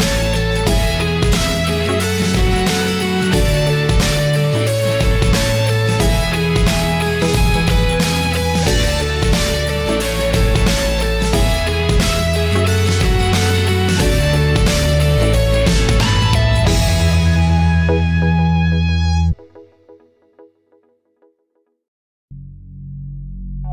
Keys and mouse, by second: 4.0 g, 8.3 g, 10.9 middle click, 11.6 e, 14.8 middle click, 15.6 e, 17.1 e, 18.7 shift+middle click, 19.4 middle click, 19.9 Tab, 20.2-21.1 middle drag, 21.4-21.8 shift+middle drag, 22.5 Tab, 22.8 middle click, 23.6 click.